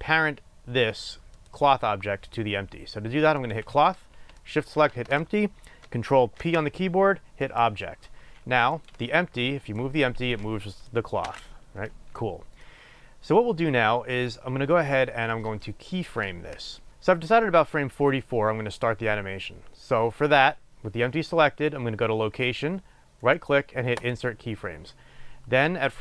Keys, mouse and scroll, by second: 4.5 shift+click, 6.5 ctrl+p, 9.0 click, 9.7-15.0 drag, 11.3 ctrl+z, 15.0-16.9 middle drag, 15.0-16.0 scroll down 2, 16.0-16.9 scroll down 1, 16.9-23.7 drag, 23.7-25.8 right drag, 25.8-26.0 drag.